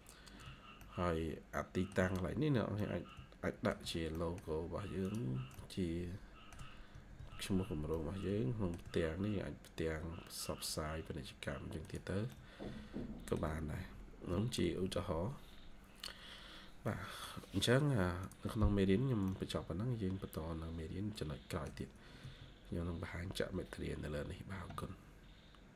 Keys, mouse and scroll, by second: 0.7 shift+middle click, 1.9 middle click, 1.9 shift+scroll up 2, 2.7 middle click, 4.0 middle click, 5.4 middle click, 6.5 middle click, 6.5 scroll down 1, 6.8 Escape, 7.0 Escape, 7.3 scroll up 1, 7.8 middle click, 8.8 scroll down 1, 12.2 middle click, 13.6 Escape, 14.1 scroll up 1, 15.4 scroll down 1, 16.7 middle click, 17.7 scroll up 1, 19.1 middle click, 22.1 Escape, 22.6 scroll down 1.